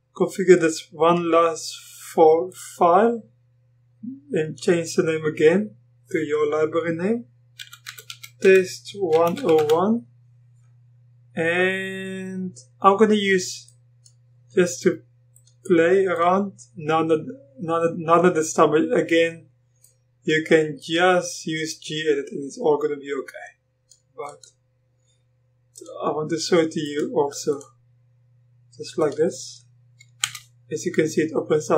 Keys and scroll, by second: 7.6 t, 9.1-10.1 typing, 30.2 Return.